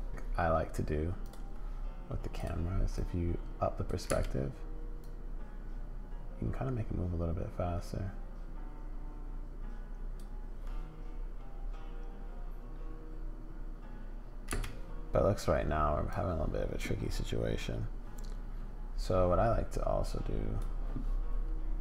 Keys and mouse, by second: 0.1 space, 2.4 click, 3.0 click, 4.1 space, 5.0-10.2 drag, 14.5 space, 16.1-20.6 drag.